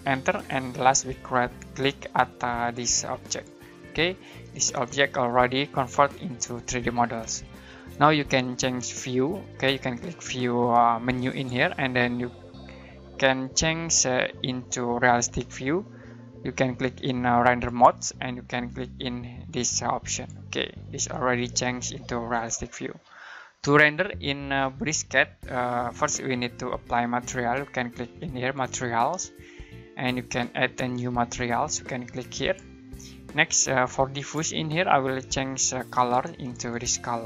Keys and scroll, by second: 0.1 space.